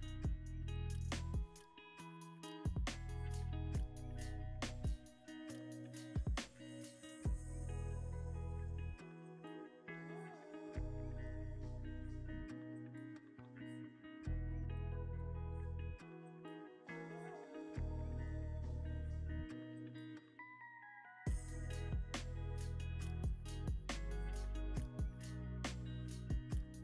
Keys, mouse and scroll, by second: 1.7 g, 5.4 middle click, 11.6 scroll up 1, 12.2 middle click, 15.0 scroll up 1, 16.4 scroll down 1, 17.0 middle click, 21.3 ctrl+alt+KP_0, 22.8 double click, 23.4 g, 23.6 x, 24.1 z, 24.7 x, 26.6 g.